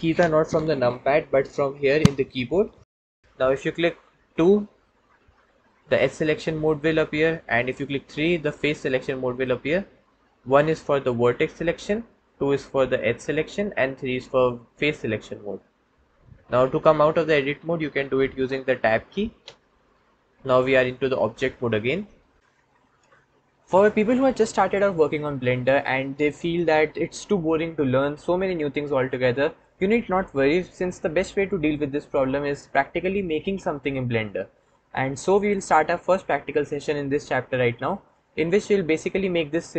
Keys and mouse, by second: 4.9 2, 7.9 3, 8.5 click, 10.3 1, 11.2 click, 12.3 2, 13.1 click, 13.8 3, 14.7 click, 19.3 Tab.